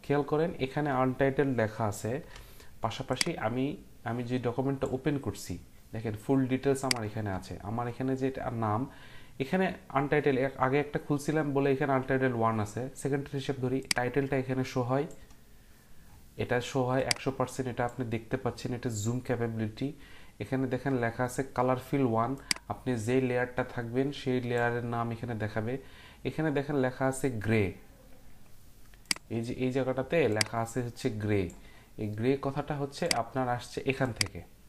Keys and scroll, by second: 2.2 Print.